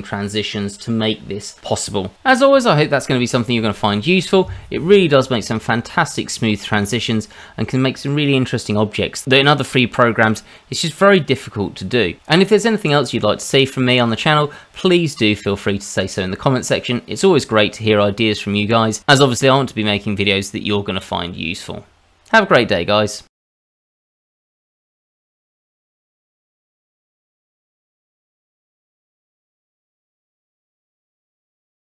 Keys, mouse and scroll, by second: 0.6-2.8 scroll up 4, 2.9 click, 4.0 middle click.